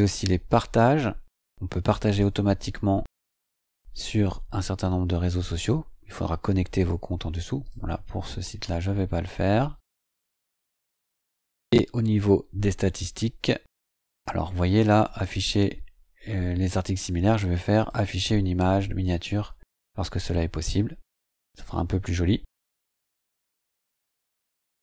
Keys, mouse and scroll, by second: 2.1 click, 7.6 click, 9.8 scroll up 1, 11.0 click, 11.6 click, 14.0-14.4 scroll down 2, 17.7 click, 20.0 scroll down 2, 22.4-22.7 scroll down 2, 23.2-23.5 scroll down 2, 24.1-24.8 scroll down 2.